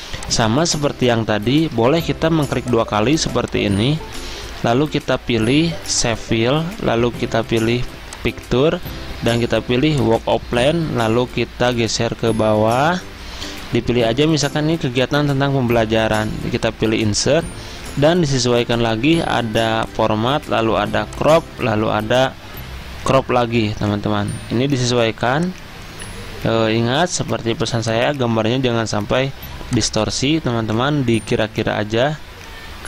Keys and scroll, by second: 1.9 ctrl+z, 4.3 ctrl+z.